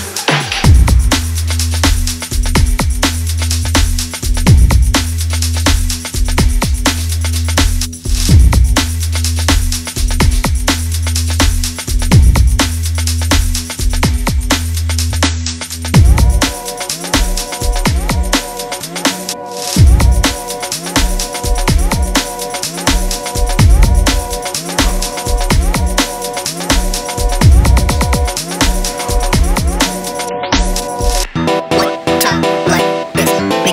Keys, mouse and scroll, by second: 0.8 click, 1.2 scroll down 3, 1.3 scroll up 1, 1.4 middle click, 1.5 click, 2.2-6.0 drag, 6.5 click, 7.1 scroll up 1, 7.2 click, 7.6 right click, 7.7 click, 7.9 scroll down 3, 8.0 scroll up 1, 8.3 KP_7, 8.7 click, 9.1 scroll up 1, 9.3 scroll down 1, 9.4 z, 10.1 click, 10.3-11.3 scroll up 1, 14.9 scroll down 1, 15.1-15.4 scroll up 1, 15.4 click, 16.9 s, 17.3 g, 19.0 click, 19.4 ctrl+z, 20.1 ctrl+z, 20.8 shift+click, 21.2 s, 23.5 click, 24.3 shift+click, 24.9 shift+click, 25.3 s, 29.3 click, 29.4 scroll down 1, 29.6 scroll up 1, 29.8 z, 30.1 scroll down 2, 30.3 click, 30.8 click, 31.3 scroll up 1, 31.4 click, 31.7 click, 32.5 click, 32.6 scroll down 1, 32.9 alt+shift+click, 33.1-33.7 scroll up 2, 33.3 click.